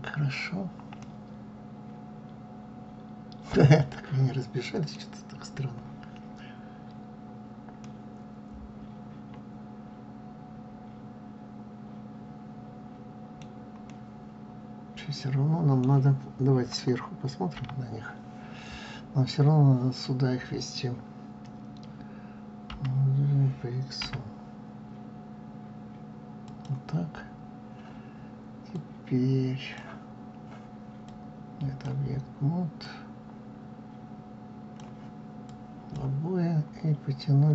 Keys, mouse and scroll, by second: 0.9-3.9 middle drag, 5.2 scroll down 1, 7.7-15.7 middle drag, 15.7-16.7 scroll up 1, 17.5 KP_7, 22.6 g, 28.6-35.4 drag, 36.9 scroll down 2.